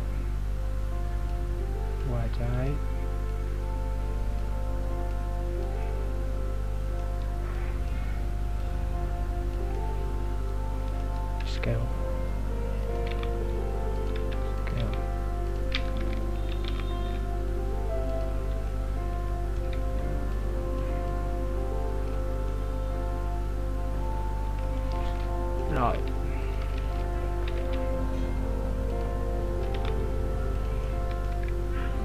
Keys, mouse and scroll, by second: 5.8 middle click, 7.6 click, 9.9 middle click, 11.4 s, 16.0 KP_3, 16.6 g, 18.8 middle click, 20.4 click, 22.5 middle click, 26.0 s, 27.0 ctrl+z, 27.6 s, 29.8 g, 30.9 middle click, 31.3 KP_3.